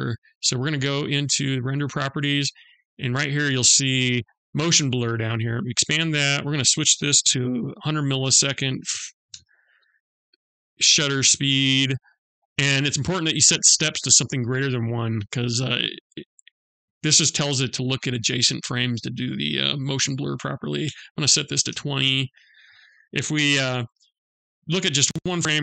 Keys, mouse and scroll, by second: 0.4 click, 3.9 click, 4.7 click, 5.8 click, 12.3 click.